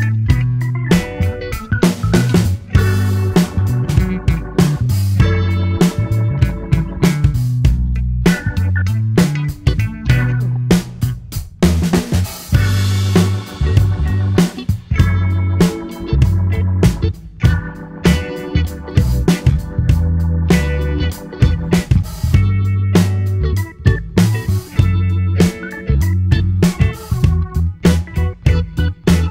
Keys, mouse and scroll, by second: 0.1-3.1 drag, 9.2 click, 12.5-15.5 drag, 15.9 click, 16.1 click, 17.9-20.8 drag, 22.6 middle click, 23.5 space, 26.0 space, 26.2 middle click, 26.9 scroll up 2, 27.7 click, 28.6 click.